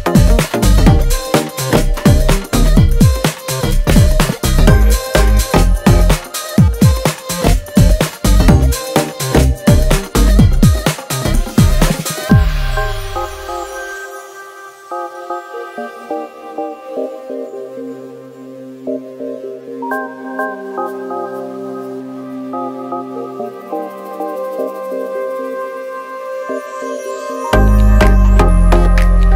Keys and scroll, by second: 1.4 space, 6.6 space, 6.9 space, 8.1-10.2 typing, 11.7 space, 12.1 Tab, 13.0 g, 13.6 space, 13.9 space, 16.0 g, 16.8 space, 18.8 space, 22.6 shift+d, 26.2 space, 27.5-29.3 typing, 27.6 Return.